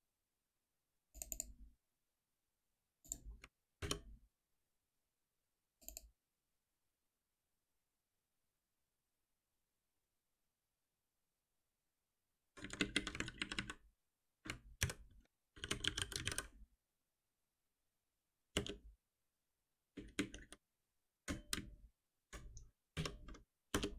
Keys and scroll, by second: 3.8 alt+F7, 13.2 ctrl+w, 14.8 ctrl+alt+m, 22.9 F6.